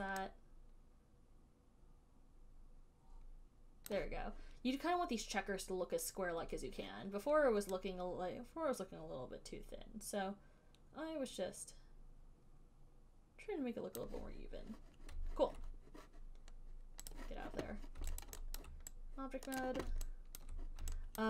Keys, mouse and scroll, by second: 4.2 click, 14.3 click, 17.5 click, 18.5 alt+right click, 18.8 alt+right click, 19.9 right click, 20.7 alt+right click.